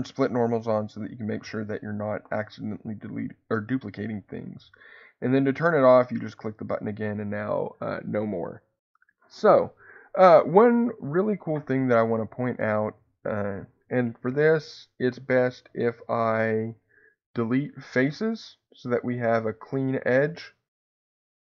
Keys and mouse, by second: 0.6-6.8 drag.